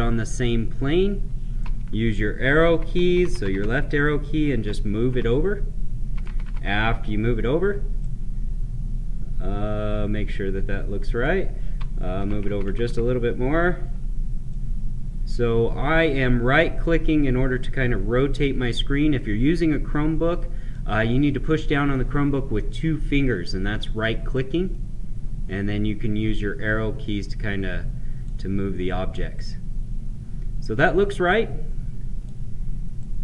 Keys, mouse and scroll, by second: 1.8 Left, 7.9-12.1 right drag, 14.4-23.0 right drag, 24.3-33.2 right drag.